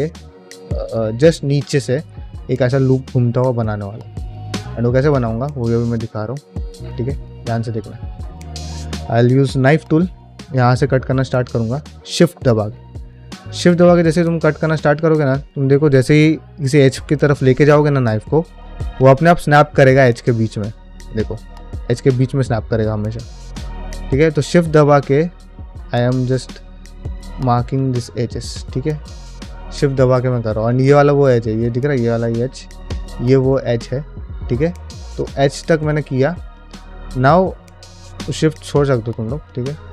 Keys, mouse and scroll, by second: 1.1 middle click, 3.7 shift+middle click, 4.1 ctrl+middle click, 4.3 middle click, 4.6 shift+middle click, 5.6 middle click, 7.4 middle click, 9.5 k, 38.1-39.9 middle drag.